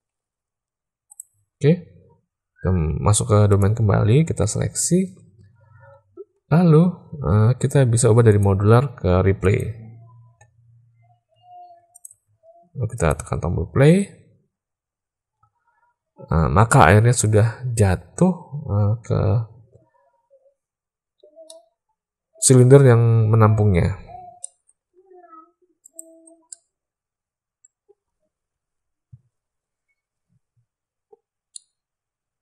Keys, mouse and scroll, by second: 1.0 click, 3.4 click, 8.2-9.7 drag, 11.3 z, 12.9 click, 21.6-22.6 middle drag, 24.5 middle drag, 25.9 drag, 26.5-27.9 middle drag, 31.6-32.4 middle drag.